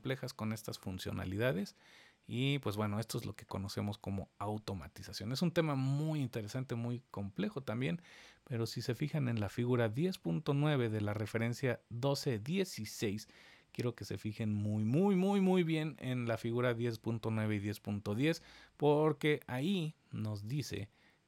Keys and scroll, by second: 0.1 super+z.